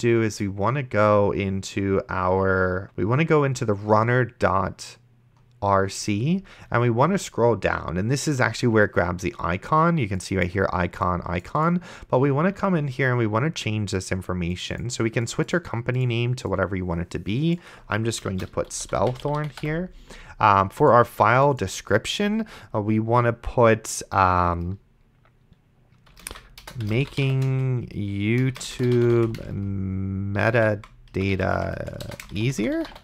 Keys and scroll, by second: 18.3-20.1 typing, 26.3-33.0 typing.